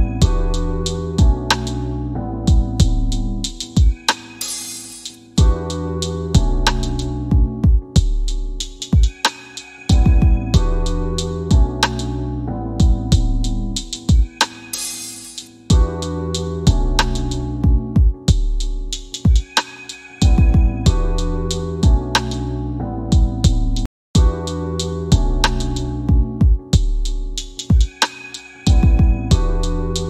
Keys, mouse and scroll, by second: 0.1 shift+f, 0.7 scroll down 1, 1.8 click, 2.3 scroll up 1, 3.6 F4, 4.0 alt+middle click, 5.5 middle click, 6.3 click, 6.9 m, 8.6 click, 18.3 click, 23.3-24.8 typing, 25.2 click.